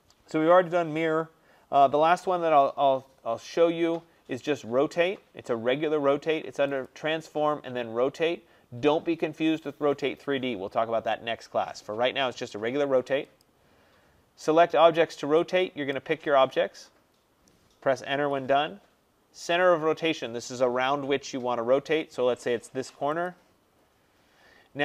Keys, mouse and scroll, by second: 1.8-3.3 scroll down 9, 3.3 middle click, 3.4 middle click, 3.5 middle click, 3.5 middle click, 6.9 click, 13.5 click, 16.0 click, 18.2 Return, 23.4-24.8 drag.